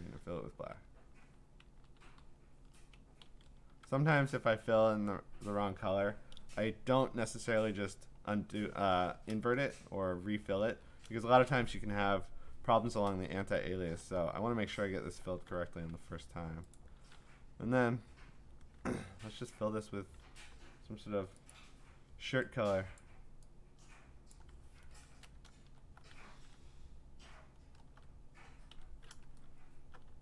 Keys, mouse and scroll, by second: 0.6 ctrl+d, 1.7 ctrl+z, 2.1 ctrl+z, 3.2 ctrl+z, 13.7 ctrl+BackSpace, 14.9 scroll, 15.4 ctrl+d, 16.7 click, 20.3 b, 21.6 click, 23.0 click, 24.3 click, 25.0 Return, 25.5 alt+BackSpace, 26.4 ctrl+d, 26.8-27.2 scroll down 7, 27.2-27.7 scroll up 10, 28.7 i, 29.3 ctrl+scroll up 2, 29.5-30.2 scroll.